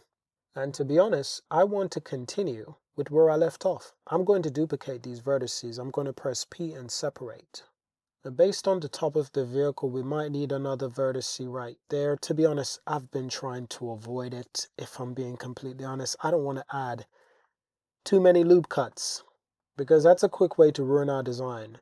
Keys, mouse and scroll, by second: 0.1 shift+drag, 0.8 click, 4.2 shift+d, 5.1 shift+d, 6.0 p, 6.9 Tab, 7.3 click, 8.7 super+r, 9.1 click, 9.9 click, 11.3 shift+click, 13.2 super+z, 14.8-16.0 shift+drag, 16.4 super+e, 17.1 super+r, 17.5 click, 18.1 click, 18.9 shift+click, 19.3 alt+z, 19.4 Tab, 19.6-21.1 drag.